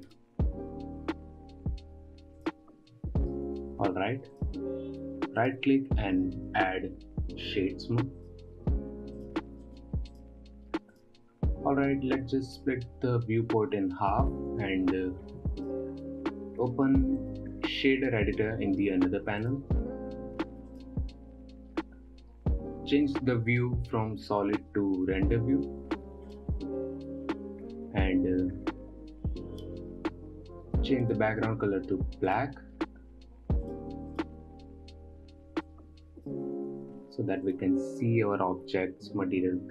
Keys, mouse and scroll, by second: 0.5 shift+a, 4.3-4.9 scroll up 7, 4.9-5.9 drag, 5.9-9.6 right drag, 9.6 click, 10.1-11.4 right drag, 11.4 click, 14.6-20.8 drag, 21.2 click, 21.4 n, 22.5-23.3 scroll up 2, 27.6 click, 30.1 click, 31.5 click, 34.7 click, 37.9 click.